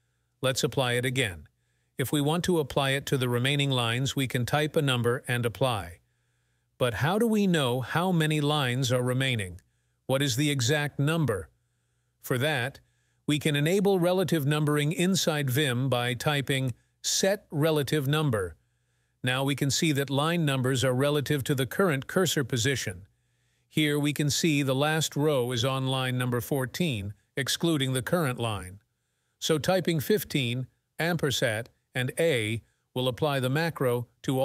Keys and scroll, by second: 0.0-0.1 typing, 31.1 @.